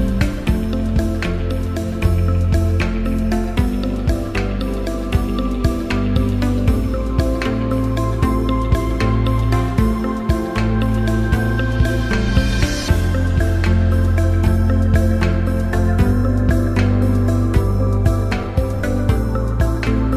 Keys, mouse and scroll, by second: 2.1 click, 7.1 click, 9.0 click, 14.5 click, 16.4-19.2 drag.